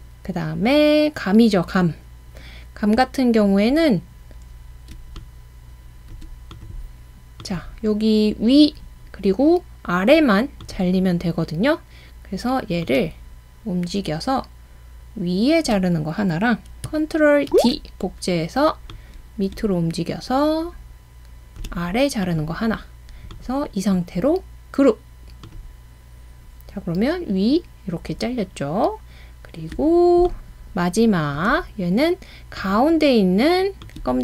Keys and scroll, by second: 17.5 super+d.